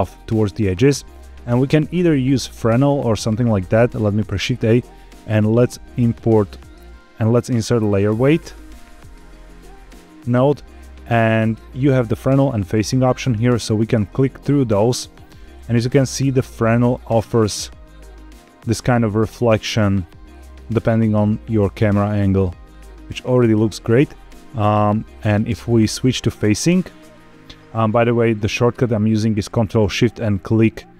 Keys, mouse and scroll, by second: 1.8-3.6 scroll up 2, 3.6 click, 4.0 shift+a, 14.5 ctrl+shift+click, 16.5-17.0 scroll up 2, 17.0-18.6 middle drag, 19.2-20.5 middle drag, 20.7-21.1 shift+middle drag, 21.2-23.4 middle drag, 25.3 ctrl+shift+click, 30.3 ctrl+shift+click.